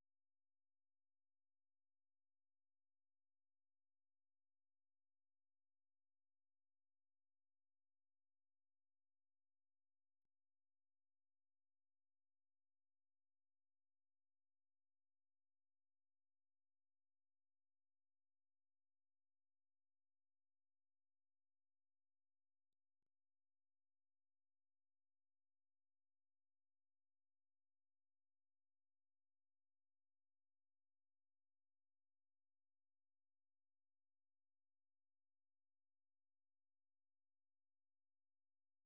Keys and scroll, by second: 0.0-0.9 typing, 2.0-3.6 typing, 6.0-18.8 typing, 20.1 j, 20.5 j, 25.6-29.5 typing, 32.4 alt+Tab, 33.7 F6, 33.7 typing, 34.3 alt+Tab, 35.2 alt+Tab, 35.4-38.2 typing.